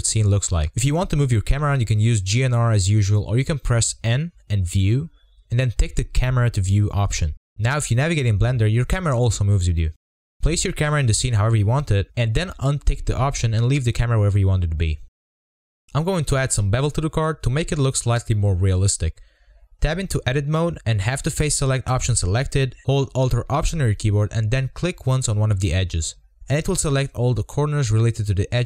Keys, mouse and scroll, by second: 3.2 n, 5.6 click, 5.8-6.1 shift+middle drag, 6.1 scroll up 2, 6.2 shift+middle click, 6.4 scroll down 3, 6.5 scroll up 2, 6.7 shift+middle click, 6.8 scroll down 1, 6.9 shift+middle click, 7.3 click, 7.5 g, 7.9-8.4 scroll up 2, 8.0-8.3 shift+middle drag, 8.4 shift+middle click, 8.5 scroll down 1, 8.6 shift+middle click, 9.1 click, 9.5 click, 9.7 click, 10.3 shift+middle click, 10.7 scroll down 1, 10.8-11.3 scroll up 1, 11.4 click, 11.5 g, 12.0 g, 12.7 click, 13.1 z, 15.1-16.2 drag, 16.2 n, 16.7-17.3 middle drag, 17.3 scroll down 3, 17.5-17.8 shift+middle drag, 17.8-18.7 scroll up 17, 18.2 z, 18.3 shift+middle click, 18.7 click, 24.6 click, 26.4 alt+click, 28.5 ctrl+b.